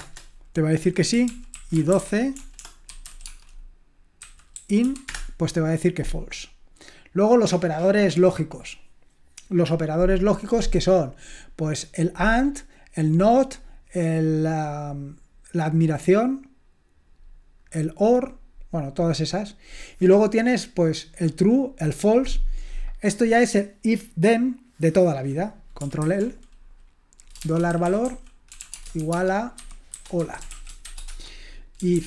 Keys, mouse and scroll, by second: 0.0-0.5 typing, 1.3 ctrl+p, 1.5 ctrl+a, 1.8-6.7 typing, 6.5-10.1 scroll down 1, 10.1-11.5 scroll down 1, 11.5-13.8 scroll down 1, 23.2-24.2 scroll down 2, 24.2-25.2 scroll down 1, 25.2-26.0 scroll down 1, 26.0 ctrl+l, 27.2-32.0 typing.